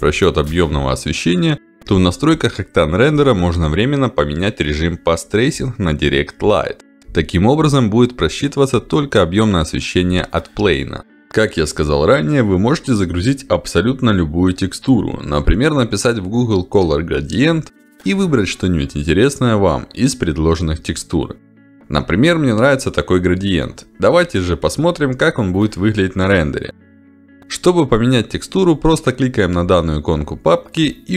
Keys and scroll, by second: 26.9 Delete.